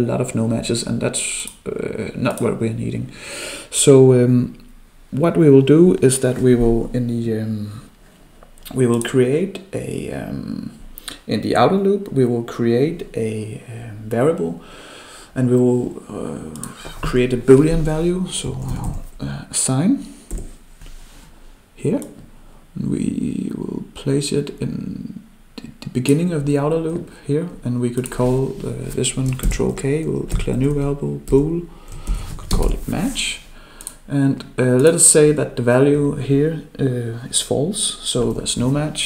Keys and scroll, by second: 29.4 ctrl+k.